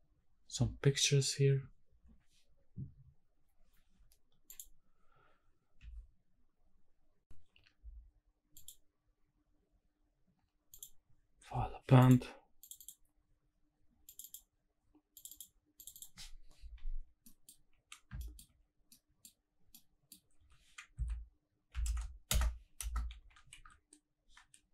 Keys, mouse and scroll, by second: 8.5-10.9 drag, 17.1 scroll down 1, 17.3 middle drag, 18.2 shift+middle drag, 18.8 scroll down 1, 18.9-19.3 middle drag, 19.3-19.7 scroll up 2, 19.7 scroll down 1, 19.7 middle click, 20.5 r, 21.0 z, 21.7 KP_9, 21.8 KP_0, 22.3 KP_Add, 22.8 KP_Enter, 23.2 g, 23.5 shift+z.